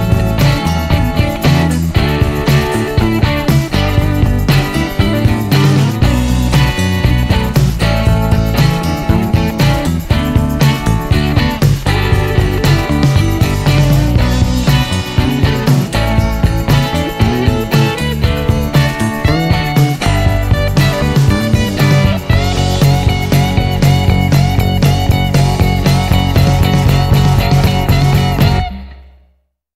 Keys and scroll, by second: 22.9-24.5 typing.